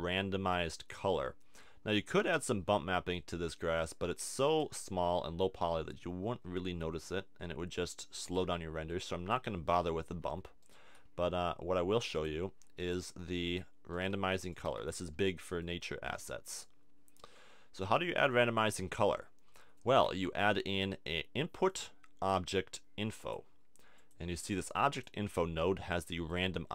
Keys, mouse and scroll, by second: 2.1-3.1 middle drag, 3.8 click, 8.2 click, 10.3 Tab, 11.2 g, 13.0 g, 14.1 g, 14.7 a, 14.8 Tab, 18.7-20.0 drag, 20.0 shift+a, 24.1-26.7 drag.